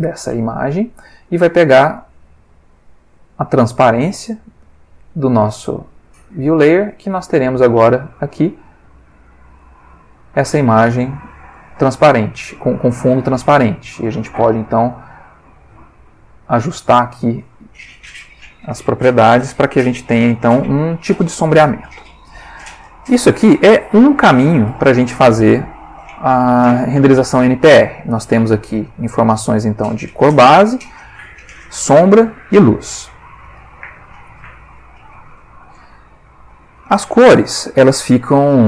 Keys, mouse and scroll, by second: 0.7 middle click, 1.6 ctrl+middle click, 2.8-5.2 drag, 4.7 middle click, 5.5 click, 6.5-7.4 drag, 8.3 click, 9.0 click, 9.6 middle click, 11.1 click, 12.1 middle click, 12.8-13.5 ctrl+middle drag, 14.0 click, 14.9 click, 22.6 ctrl+s, 24.8 Escape, 34.4 click, 35.2 click, 37.8-38.6 middle drag.